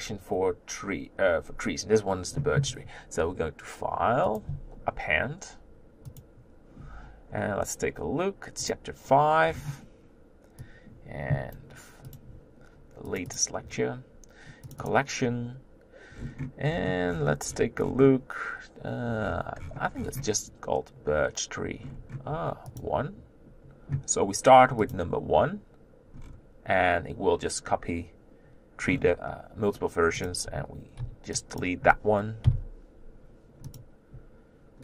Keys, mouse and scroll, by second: 6.5-28.3 drag, 28.3-28.9 scroll down 5, 28.9-30.2 scroll down 6, 30.2 click, 31.6 b.